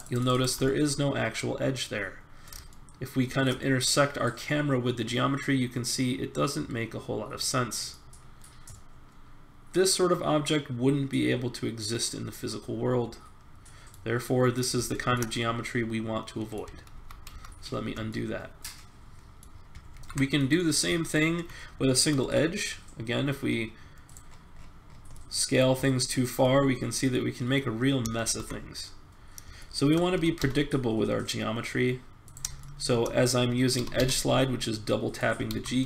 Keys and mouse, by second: 0.5 click, 0.7 click, 1.0 click, 1.3 middle click, 2.9 middle click, 3.0 middle click, 4.2 middle click, 4.5-5.5 middle drag, 8.2-10.4 middle drag, 10.6 middle click, 11.6 middle click, 14.2-16.5 middle drag, 16.9 ctrl+z, 17.3 ctrl+z, 18.2 middle click, 19.9 ctrl+Tab, 22.2 s, 24.3 middle click, 24.9 middle click, 27.3 middle click, 27.5 middle click, 28.2 ctrl+z, 29.8 middle click, 30.1 g, 33.6 g, 35.5 ctrl+z.